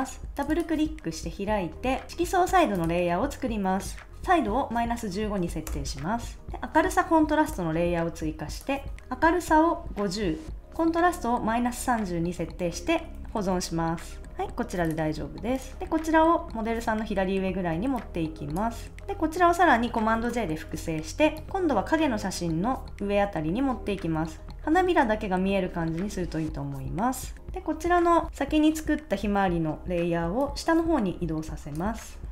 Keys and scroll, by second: 5.7 Return, 13.1 super+s, 20.1 super+j.